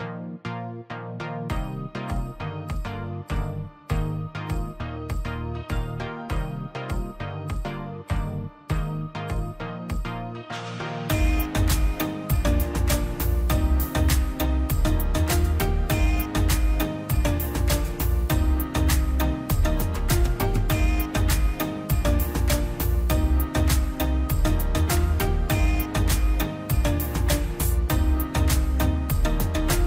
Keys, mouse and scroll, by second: 0.0 click, 0.4 middle click, 0.8 scroll up 1, 3.8 scroll up 1, 4.9 click, 5.0-5.5 scroll up 1, 5.5 click, 6.2 scroll down 1, 6.7 click, 8.0-8.4 scroll up 1, 8.5 click, 11.0 Escape, 11.3 ctrl+z, 11.5 Escape, 11.7 space, 11.9 click, 12.3 right click, 13.0 click, 14.3 right click, 14.7 click, 16.0 l, 16.6 click, 19.5 space, 19.8 click, 20.4 right click, 20.8 click, 21.5 scroll down 1, 22.6 l, 22.8-23.1 scroll up 1, 23.1 click, 27.4 right click, 28.3 click, 29.5 scroll down 1.